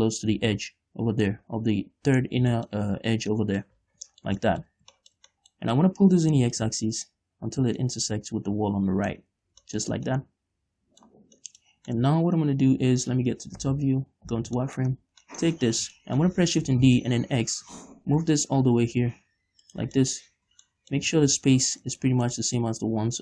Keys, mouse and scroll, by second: 1.9-3.0 scroll up 2, 3.0-4.2 shift+middle drag, 4.2 z, 4.5-7.0 shift+middle drag, 7.0-10.1 drag, 10.4 scroll down 2, 10.6-13.5 middle drag, 11.7 scroll down 2, 12.2 Tab, 14.0 KP_7, 14.7 z, 15.1 shift+middle click, 15.4 Tab, 15.7 shift+middle click, 16.1 scroll up 1, 16.4 shift+middle click, 17.1 shift+d, 20.2 shift+click, 20.4 shift+middle click, 20.7-21.2 scroll up 2, 21.2 shift+middle click, 21.6 scroll down 1, 22.0 shift+middle click, 22.3 scroll down 2, 22.5 shift+middle click, 23.1 scroll up 1.